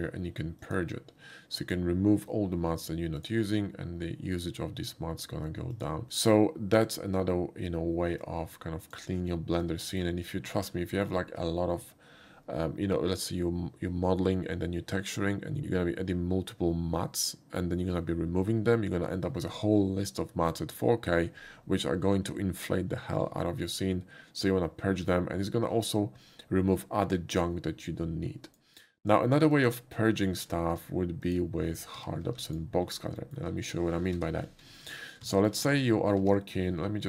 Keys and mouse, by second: 0.6 click, 1.6 click, 3.2 click, 5.7 click, 8.2 click, 9.7-10.0 middle drag, 10.5 shift+middle click, 10.9 shift+middle click, 24.0 typing, 28.5 click, 29.5 click, 31.3 click, 32.3 x, 32.5 click, 33.2 middle drag, 34.2 n, 34.8 middle click, 35.3 middle drag.